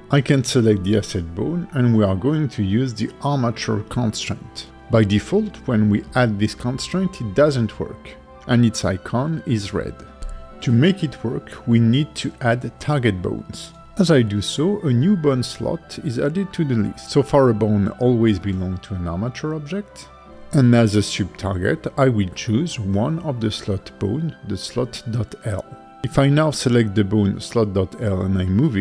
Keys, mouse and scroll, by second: 6.4 click, 14.8 click, 16.1 click, 22.8 click, 23.7 click, 24.4 click, 25.2 click, 27.6 click, 28.4 g.